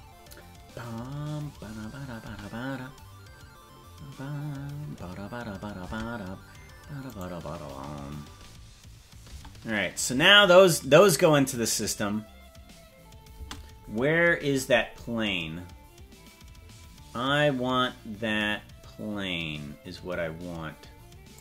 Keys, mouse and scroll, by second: 2.2 space, 6.0 space, 7.1 right click, 9.3 space, 13.4 space, 18.3-18.7 scroll up 2, 21.3 click.